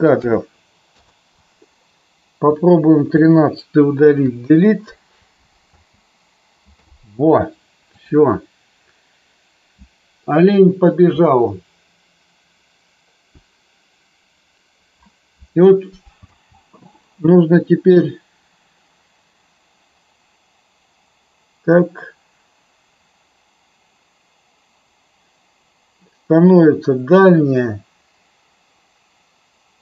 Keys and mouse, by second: 2.3 click, 4.2 Delete, 5.6 space, 16.2 space, 17.9-29.8 drag.